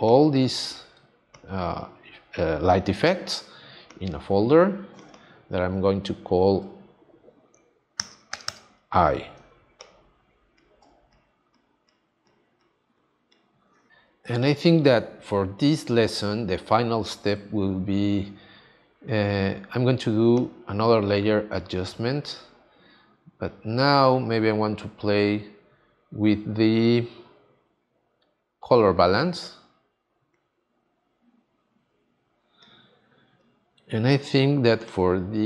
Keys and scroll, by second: 8.0 e, 8.3 y, 15.2 space.